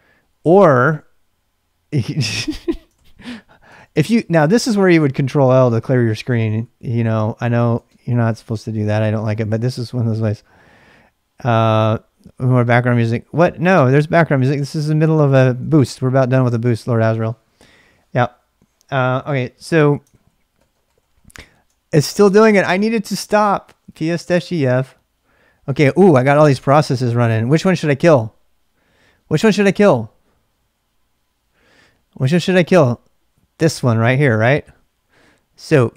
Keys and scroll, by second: 0.0-2.9 typing, 2.9 ctrl+l, 3.7 ctrl+l, 4.5 BackSpace, 4.9 ctrl+l, 5.4 ctrl+BackSpace, 5.8 ctrl+l, 6.1 ctrl+l, 6.2 ctrl+l, 6.4 ctrl+l, 6.6 ctrl+l, 7.8 ctrl+l, 8.3 ctrl+l, 8.7 ctrl+l, 8.9 ctrl+l, 9.1 ctrl+l, 9.3 ctrl+l, 9.5 ctrl+l, 9.6 ctrl+l, 12.2-19.5 typing, 13.9 ctrl+l, 20.1 ctrl+l, 20.6 ctrl+l, 20.7 ctrl+l, 20.8 ctrl+l, 21.0 ctrl+l, 21.1 ctrl+l, 21.3 ctrl+l, 23.6-24.9 typing, 35.7-35.9 typing.